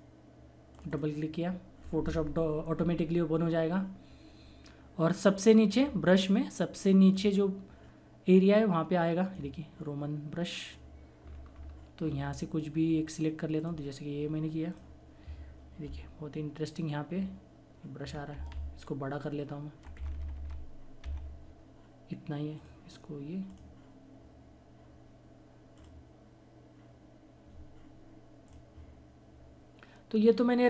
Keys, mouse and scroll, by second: 7.7-12.7 drag, 13.2 scroll down 1, 15.6 click, 17.9-19.4 typing, 21.1-22.0 typing, 24.6 click, 30.5 click.